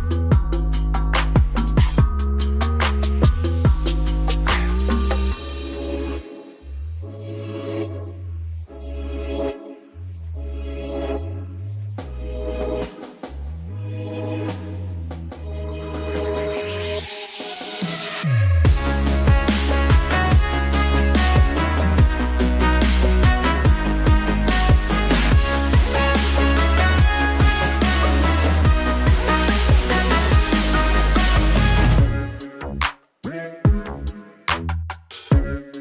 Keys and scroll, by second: 22.3 Down, 28.7 alt+space.